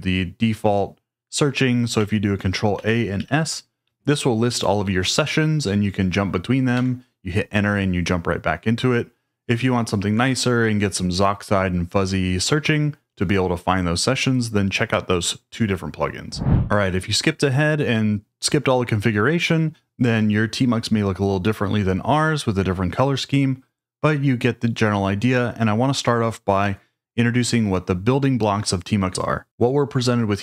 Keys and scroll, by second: 2.7 ctrl+a, 3.1 s, 6.7 Return.